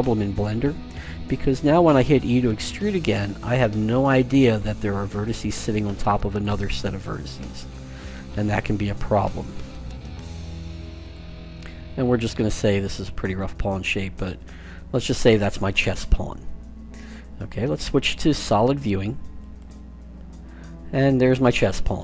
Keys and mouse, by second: 2.3 e, 9.0 s, 10.4 e, 11.1 s, 12.2 e, 12.9 s, 18.1 click, 19.3 click, 19.7 click, 20.4-22.0 middle drag.